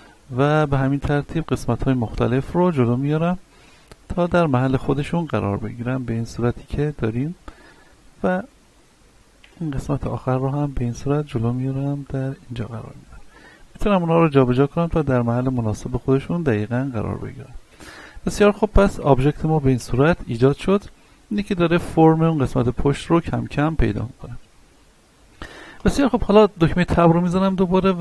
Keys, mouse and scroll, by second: 1.4 middle click, 2.2 right click, 2.6 shift+middle click, 3.3 shift+right click, 4.9 shift+middle click, 5.6-7.5 drag, 7.5 middle click, 8.4 right click, 10.5-12.9 drag, 12.9 right click, 13.8-14.1 drag, 14.3 right click, 15.1 click, 16.1 shift+middle click, 17.1 right click, 17.4 scroll down 1, 17.9 Tab, 18.3-20.2 middle drag, 20.2-20.5 scroll down 1, 20.6 shift+middle click, 21.5 a, 22.1-25.1 middle drag, 25.7 right click, 26.9 Tab, 27.4 middle click.